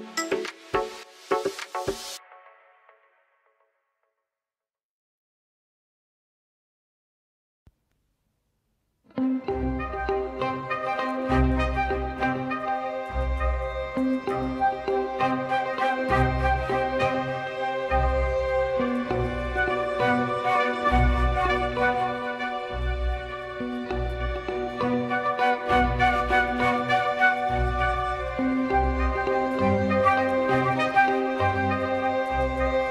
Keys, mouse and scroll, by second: 0.4-1.0 drag, 3.0 click, 3.9 g, 8.0 click, 8.5 click, 8.6-9.9 drag, 12.5-13.3 drag, 15.1 click, 16.9 click, 17.3 click, 18.4-19.8 drag, 21.3 shift+middle click, 21.8 middle click, 22.4 click, 22.9-26.1 drag, 24.3 BackSpace, 24.5 BackSpace, 26.4 middle click, 26.9 Tab, 27.3 shift+click, 28.0-28.6 drag, 28.6 Tab, 29.5 click, 30.3 r, 32.3-32.9 drag.